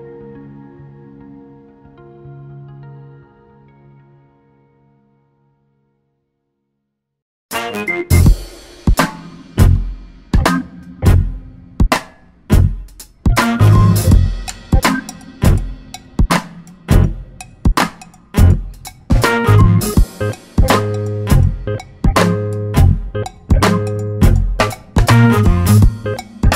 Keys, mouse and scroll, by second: 1.4 scroll up 2, 2.2 scroll down 2, 3.6-5.8 drag, 5.0 shift+a, 6.6-8.7 drag, 9.4 click, 11.2 ctrl+s, 13.6 click, 14.9 alt+a, 15.9 scroll up 1, 19.4 scroll up 1, 20.0 click.